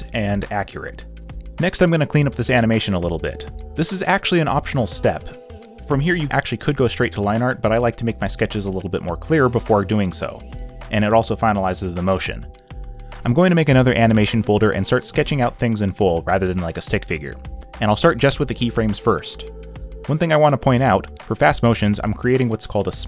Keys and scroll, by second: 2.3 space, 2.4 x, 2.8 space, 2.9 z, 4.3 space, 6.1 ctrl+z, 7.4 e, 8.7-12.4 typing, 13.4 ,, 14.4 ., 14.7 ,, 16.6 space, 17.1 space, 17.3 ctrl+z, 17.5 space, 18.2 ctrl+z, 19.0 space, 19.8 b, 20.4 space, 21.2 ctrl+z, 21.4-23.0 typing.